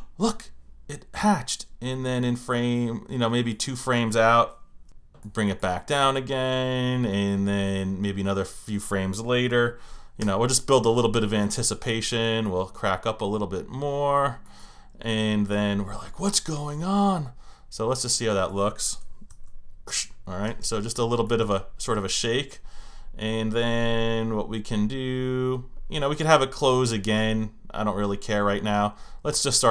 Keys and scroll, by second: 10.2 F6, 19.3 Return.